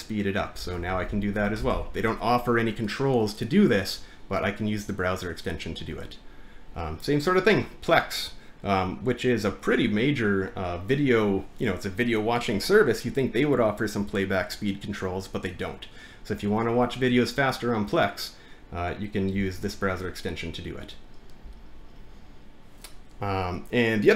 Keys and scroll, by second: 0.5-2.4 typing.